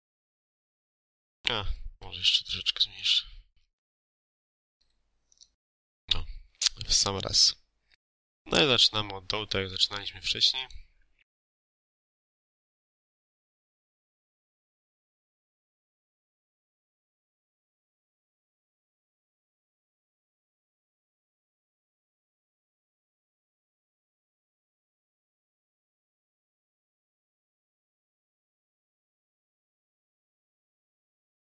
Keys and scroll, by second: 1.9 ctrl+a, 3.7 7, 4.1 Return, 13.4-14.4 typing, 15.3 Escape, 17.7-21.9 typing, 19.6 ctrl+alt+e, 22.9-24.3 typing, 23.5 ctrl+a, 26.3 shift+;, 27.5 shift+;, 28.8 shift+;.